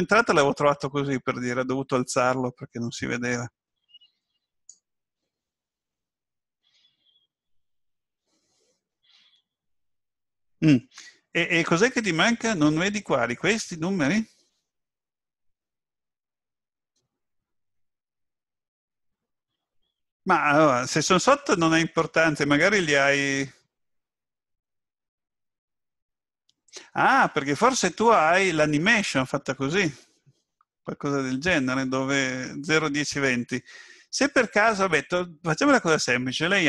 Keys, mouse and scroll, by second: 35.7 click.